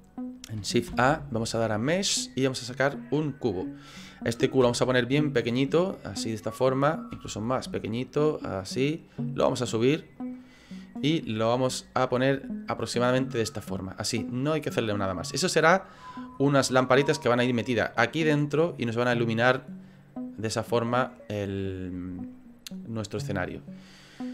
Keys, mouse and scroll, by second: 0.9 shift+a, 5.9 middle click, 6.6-7.1 scroll up 3, 7.1 s, 9.3 click, 10.1 click, 12.8 click, 14.5 middle click, 16.4-16.8 scroll down 2, 16.8 middle click, 23.5 middle click.